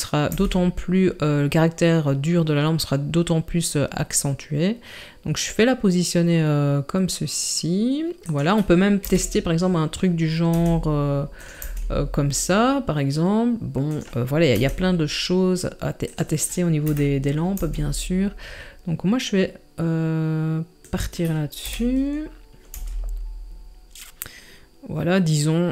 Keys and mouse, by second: 0.3 g, 9.0 KP_1, 10.5 r, 11.6 g, 14.6 r, 16.9 KP_7, 17.6 g, 21.6 KP_1, 22.7 g.